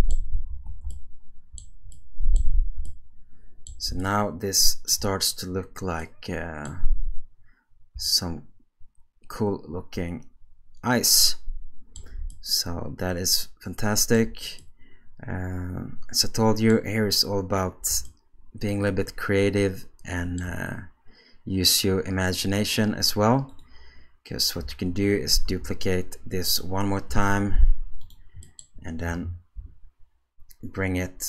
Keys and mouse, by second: 0.5 alt+a, 0.9-2.4 shift+middle drag, 2.9-3.7 shift+middle drag, 4.0-4.9 ctrl+middle drag, 6.0 middle click, 8.1-12.0 shift+middle drag, 12.3-14.2 ctrl+middle drag, 14.6-16.7 middle drag, 18.1-20.4 shift+middle drag, 23.5 click, 25.5 shift+d, 27.1 g, 28.5 click, 29.6 KP_7.